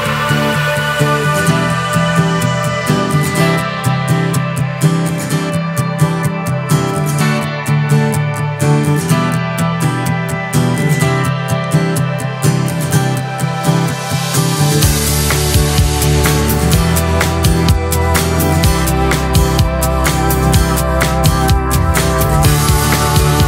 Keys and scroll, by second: 4.8 ctrl+d.